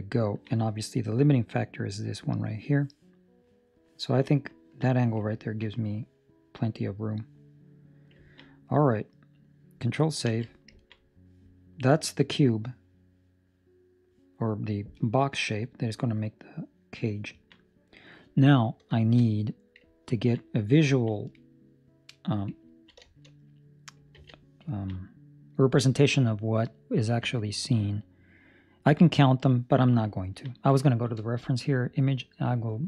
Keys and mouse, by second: 0.1 ctrl+middle click, 4.5 ctrl+middle click, 5.7 middle click, 8.1 ctrl+middle click, 8.4 middle click, 8.9 middle click, 10.3 ctrl+s, 10.7 ctrl+middle click, 10.9 middle click, 14.2 middle click, 16.1 middle click, 16.9 middle click, 17.4 ctrl+middle click, 17.5 ctrl+middle click, 18.9 shift+middle click, 19.2 middle click, 20.1 ctrl+middle click, 20.3 middle click, 20.8 ctrl+middle click, 22.9 shift+middle click, 23.2 middle click, 24.1 z, 24.6 ctrl+middle click, 24.9 middle click, 30.1 ctrl+middle click, 30.8 shift+middle click.